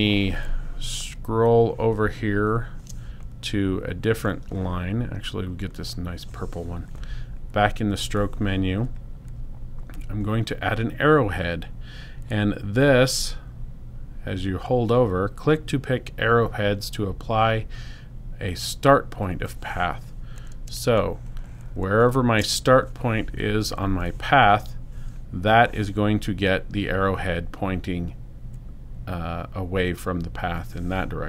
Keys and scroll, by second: 20.9 space.